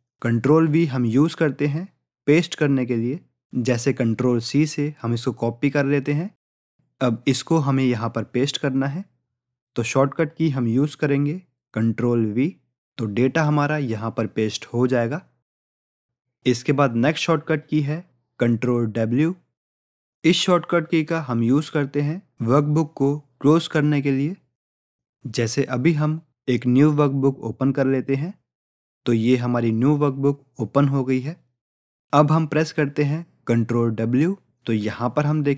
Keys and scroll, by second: 5.7 ctrl+c, 12.5 ctrl+v, 34.2 ctrl+w.